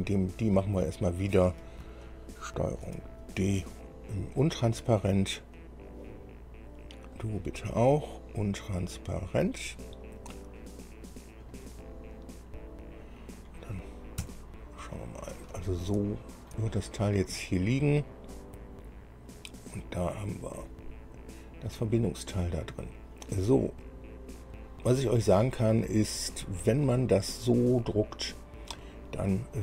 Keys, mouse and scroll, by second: 0.5 click, 3.1 ctrl+d, 5.4 click, 7.4 click, 8.8 click, 10.8 scroll up 2, 11.3 scroll down 2, 11.8-13.9 middle drag, 14.4 KP_1, 16.2 shift+middle click, 17.2-17.5 shift+scroll up 3, 17.6-21.1 drag, 21.3 scroll up 1, 23.0 scroll down 1, 24.1-26.5 drag, 26.7-27.2 scroll up 1, 28.0-29.6 drag.